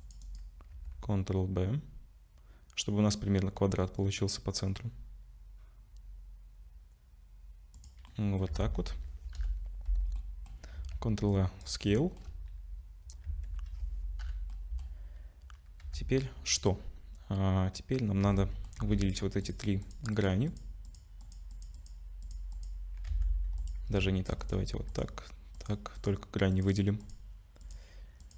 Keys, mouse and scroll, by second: 0.7 ctrl+b, 8.1 middle click, 8.5 Tab, 9.4 /, 10.2 middle click, 10.8 ctrl+a, 12.0 shift+middle click, 12.4-13.3 scroll up 3, 13.3 Tab, 14.2 /, 14.5 middle click, 15.1-15.6 scroll up 1, 15.8 2, 18.2 2, 18.4 middle click, 18.8 3, 19.0 click, 19.4 click, 19.8 ctrl+click, 19.9 ctrl+click, 20.1 click, 20.9 click, 21.2 ctrl+click, 21.6 ctrl+click, 21.8 click, 22.2 click, 22.5 ctrl+click, 23.1 2, 23.6 click, 24.4 click, 24.9 ctrl+click, 26.1 ctrl+click, 26.5 click, 27.0 ctrl+click, 28.2 ctrl+click.